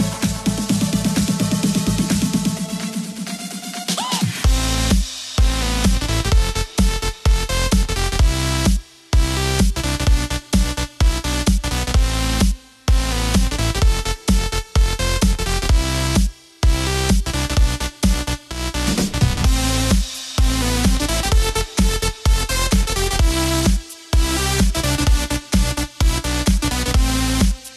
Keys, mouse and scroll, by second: 1.3 g, 8.0 r, 11.4 g, 19.7 s, 23.2 g, 27.0-27.7 scroll up 2.